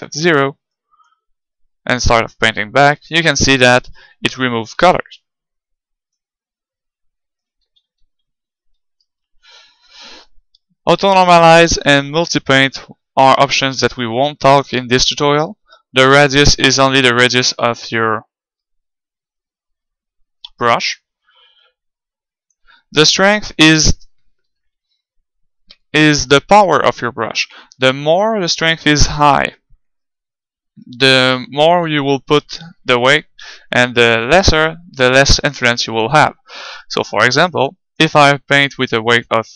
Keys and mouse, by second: 7.7 ctrl+z, 7.9 ctrl+z, 8.1 ctrl+z, 8.3 ctrl+z, 8.6 ctrl+z, 16.2-18.1 drag, 21.6-23.5 drag, 28.4-30.2 drag, 33.8-36.2 drag, 36.7-38.4 drag.